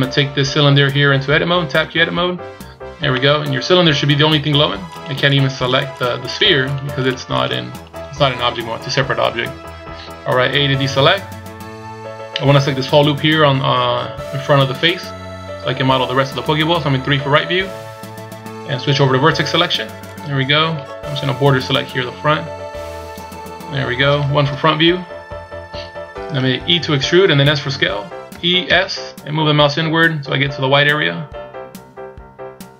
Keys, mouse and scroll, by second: 1.7 Tab, 3.0 middle click, 4.9 right click, 5.2 right click, 5.5 right click, 5.9 right click, 6.2 right click, 6.6 right click, 6.9 right click, 7.3 right click, 7.7 right click, 8.5 KP_1, 9.5-10.5 scroll up 1, 10.5 a, 17.0 KP_3, 17.9-19.0 scroll down 1, 20.0 click, 21.2 b, 24.4 KP_1, 25.2-27.6 scroll up 2, 28.2 e.